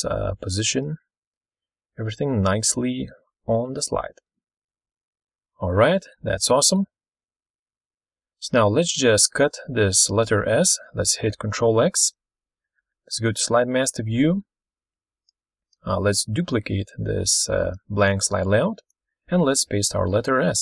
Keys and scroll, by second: 0.0-0.7 typing, 1.2 ctrl+shift+c, 1.6 Caps_Lock, 2.0 ctrl+shift+v, 4.0 ctrl+z, 6.1 ctrl+super+Left, 6.4 ctrl+super+Right, 7.4 ctrl+super+Left, 7.5 ctrl+super+Right, 11.8 ctrl+x, 16.7 ctrl+d, 18.6 ctrl+v.